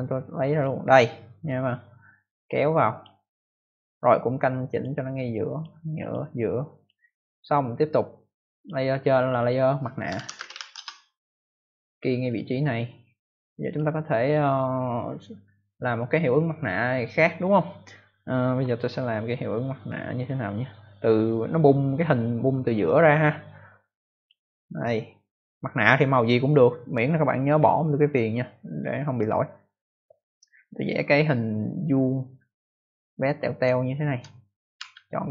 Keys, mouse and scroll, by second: 0.5 click, 2.1 click, 4.6 click, 5.4 click, 5.9 click, 6.7 click, 8.5 click, 9.1 click, 9.3 click, 9.8-11.0 typing, 12.2 click, 13.6 click, 24.0 click, 30.8 click, 33.7 ctrl+alt+scroll up 1, 34.7 v, 35.0 ctrl+scroll up 1, 35.1 click.